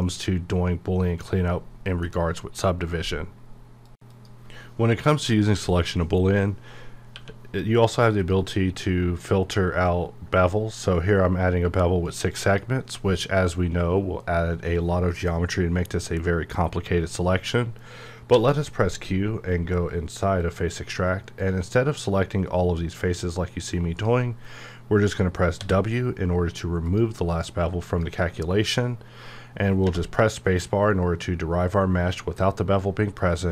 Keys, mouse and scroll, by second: 0.0-3.9 middle drag, 7.1 click, 7.3 q, 8.2 click, 9.2-9.5 scroll up 1, 12.4 scroll up 1, 12.4 click, 18.3 q, 20.4-25.6 drag, 25.6 w, 26.9 click, 29.8 space, 29.8 _.